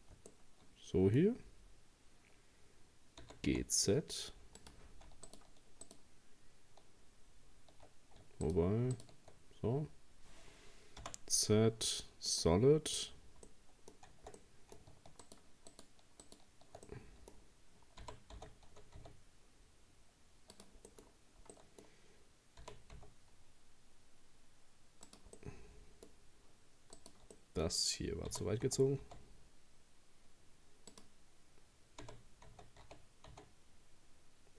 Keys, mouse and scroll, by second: 0.3-3.2 middle drag, 3.2 g, 5.3 shift+right click, 5.9 shift+right click, 8.5 shift+right click, 9.0 shift+right click, 9.5-10.2 scroll down 2, 11.0 z, 13.2-13.5 scroll up 2, 13.5-15.2 middle drag, 15.2 shift+right click, 15.7 shift+right click, 16.2 shift+right click, 16.9-18.0 middle drag, 18.0 g, 20.9 middle click, 21.1-21.5 scroll down 1, 21.5-22.6 middle drag, 22.6 g, 25.4-27.0 middle drag, 27.0 right click, 27.4 middle click, 28.3 g, 32.0 g.